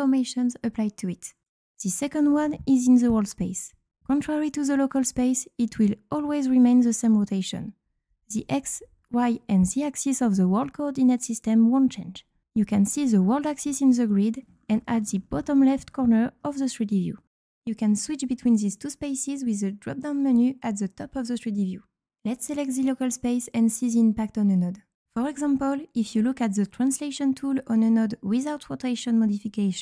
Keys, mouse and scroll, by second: 0.2 z, 0.5 z, 20.1 click, 24.1 click.